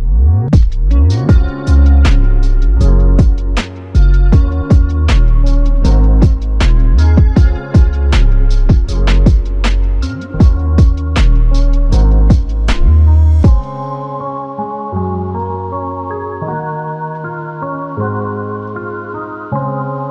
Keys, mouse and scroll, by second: 1.7 f, 2.7 double click, 5.9 click, 6.2 alt+click, 19.9 ctrl+alt+click.